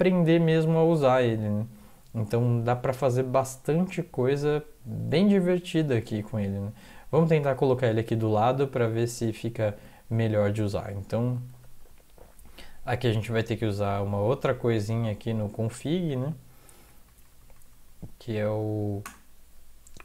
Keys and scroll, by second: 9.3 ctrl+c, 13.6 Up, 16.9 Right, 17.1-18.7 Right, 19.0 Return.